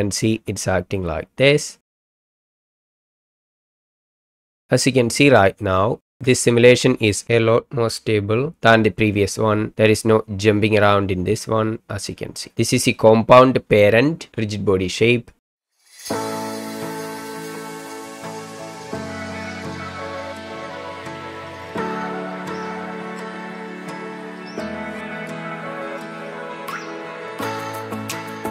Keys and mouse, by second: 5.7-6.2 shift+middle drag, 6.7 middle click, 15.7 space, 16.2 click, 16.7 middle click, 17.3 KP_1, 18.0 shift+middle click, 19.0 shift+d, 19.6 x, 20.6 click, 20.8 KP_1, 22.3-23.1 drag, 23.4 ctrl+click, 24.0 ctrl+drag, 24.7 shift+drag, 25.3 middle drag, 25.6 ctrl+drag, 26.4 KP_1, 26.8 shift+middle click, 27.4 shift+middle drag, 27.7 KP_1.